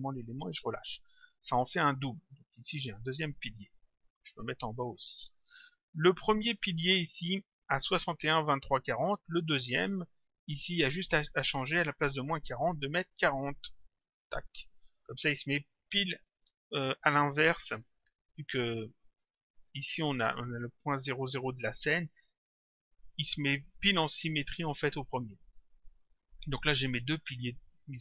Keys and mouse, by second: 2.8 click, 6.5 click, 9.7 click, 11.6 click, 14.1 Return, 19.2 click.